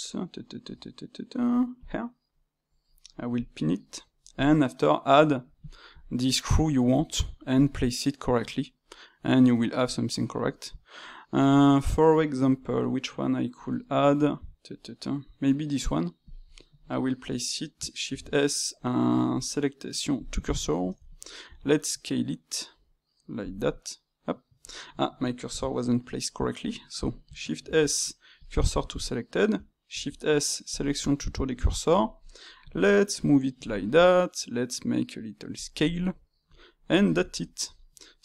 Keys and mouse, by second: 1.8-3.4 drag, 4.3-7.3 drag, 20.5 shift+middle click, 21.4 s, 23.6-26.6 middle drag, 26.6-27.6 drag, 27.6 shift+s, 28.9 click, 29.9 shift+s, 30.9-32.6 middle drag, 32.6 g, 35.7-38.2 middle drag.